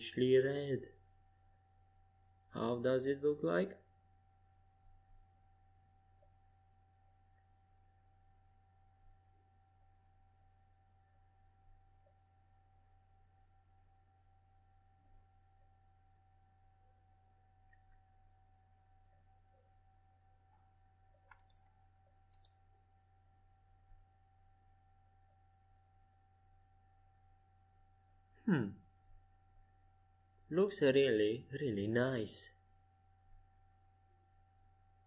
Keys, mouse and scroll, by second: 2.0 z, 3.1-4.9 middle drag, 4.5 KP_5, 4.8 KP_1, 5.2 KP_5, 5.9 KP_3, 11.0 z, 13.3 Tab, 14.6-17.6 middle drag, 17.6 z, 19.5-23.1 typing, 24.3-25.4 middle drag, 25.4 z, 26.4-27.5 middle drag, 26.4 z, 28.5 middle click, 28.8 z, 30.5 z, 33.1-33.5 scroll up 1, 33.5-35.0 middle drag.